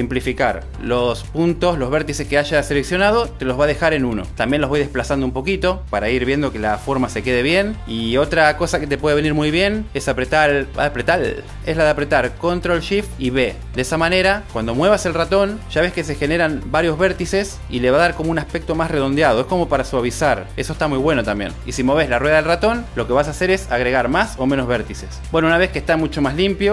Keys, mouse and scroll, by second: 2.8 click, 4.1 m, 6.9 click, 12.2 ctrl+shift+b, 19.9 click, 21.5 click, 22.2 click, 23.6 click, 24.2 click, 25.1 click.